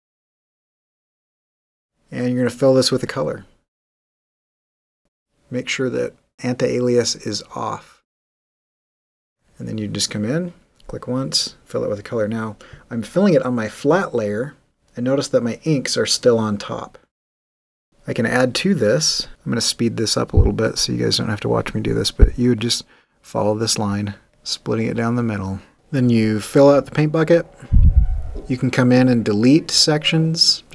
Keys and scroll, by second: 27.8 g.